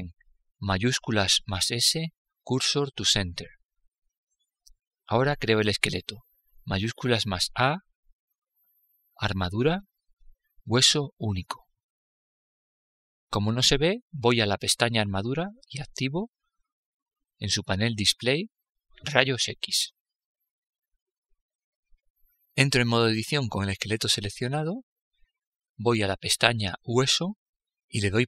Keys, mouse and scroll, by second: 6.4 shift+a, 14.7-17.6 drag, 20.1-21.8 drag, 23.9 Tab, 25.9-28.2 drag.